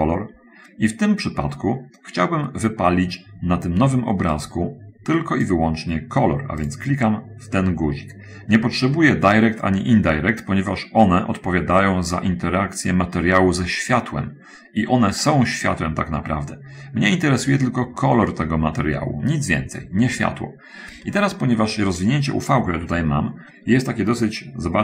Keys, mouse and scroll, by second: 4.8 click, 23.2-24.2 scroll up 1, 24.3-24.8 scroll up 2.